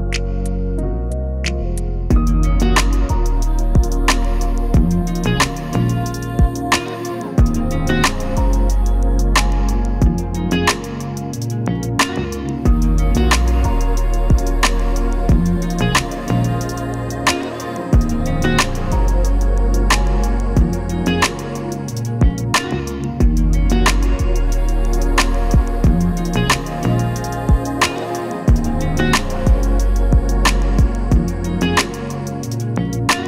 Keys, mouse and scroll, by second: 1.7 click, 2.5-5.1 drag, 5.1 right click, 6.6 click, 8.4-9.6 typing, 13.2-15.6 drag, 16.2-17.0 typing, 17.9-25.4 drag, 19.9 typing, 27.6 click.